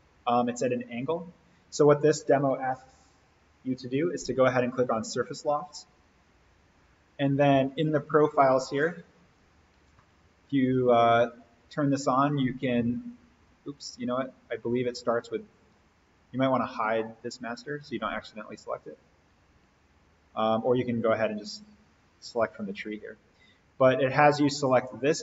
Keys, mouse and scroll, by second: 1.0 click, 4.9 click, 9.4 alt+v, 10.0-11.2 middle drag, 14.6 click, 16.0 right click, 17.2 click, 25.0 click.